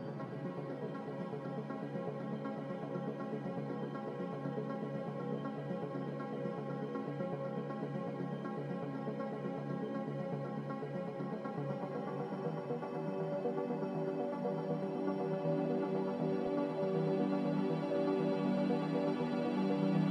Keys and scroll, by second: 8.9 z.